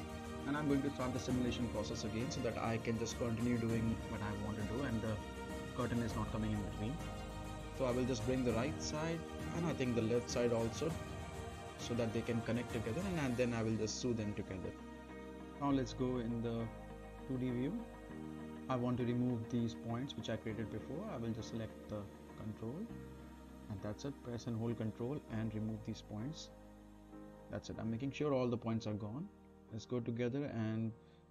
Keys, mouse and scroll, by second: 0.4-1.9 right drag, 2.0 middle click, 2.1 scroll down 1, 2.8 space, 6.0 space, 6.1-7.6 drag, 7.8-9.0 right drag, 9.4-13.9 drag, 14.2-15.9 right drag, 16.5 space, 17.5-18.1 right click, 18.6 middle click, 19.0-19.3 scroll down 1, 19.3-19.9 middle drag, 21.1 click, 22.7 middle click, 23.5-24.2 ctrl+drag, 25.6 scroll up 1, 25.8-26.4 middle click, 26.6-27.2 ctrl+drag, 29.5-30.1 middle click, 30.3-30.7 scroll down 1, 30.7-31.2 middle click.